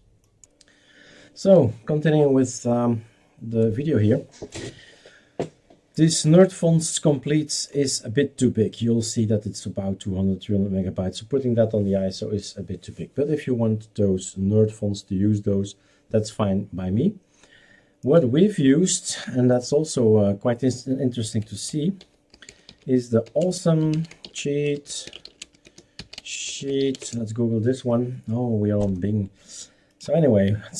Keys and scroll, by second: 21.2-27.3 typing.